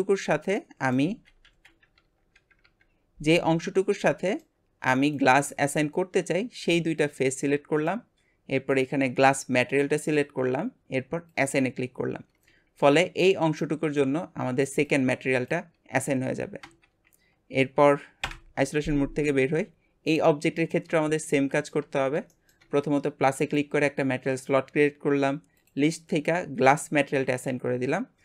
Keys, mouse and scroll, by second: 1.0 alt+z, 1.4 alt+z, 2.0 Tab, 2.3 KP_Divide, 2.6 Tab, 3.9-5.1 middle drag, 5.1 shift+click, 5.7-8.7 middle drag, 8.7 click, 11.5-18.2 drag, 18.2 KP_Divide, 19.2 Tab, 20.1 click, 21.4 shift+middle click, 22.0-22.3 scroll up 1, 22.3-23.5 shift+middle drag, 23.5-25.6 drag, 26.9-28.2 drag.